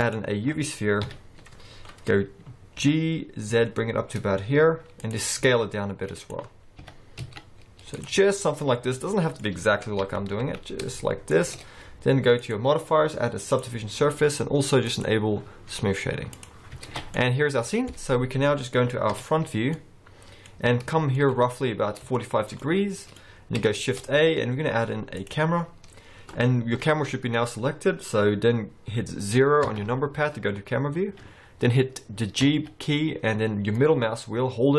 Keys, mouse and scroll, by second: 1.0 KP_1, 1.8-2.8 scroll up 2, 2.8-4.1 scroll up 1, 2.8 g, 5.5 s, 6.5-7.0 scroll up 2, 7.0 g, 8.2 middle click, 10.1 g, 12.5 click, 14.9 click, 16.9 alt+a, 16.9-17.2 alt+scroll down 4, 17.2 middle click, 18.1-19.2 scroll down 5, 19.2 KP_1, 19.8 middle click, 20.6-21.2 scroll up 2, 20.9 shift+middle click, 21.3 middle click, 22.2 shift+middle click, 22.7 middle click, 23.8 shift+a, 29.7 KP_0, 32.5 g.